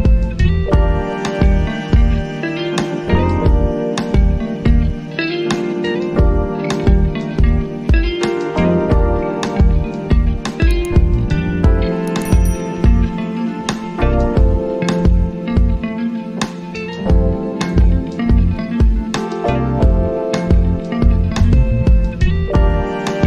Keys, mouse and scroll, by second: 1.0 space, 9.2-10.9 drag, 11.1 space, 19.6 space, 21.6-23.2 drag.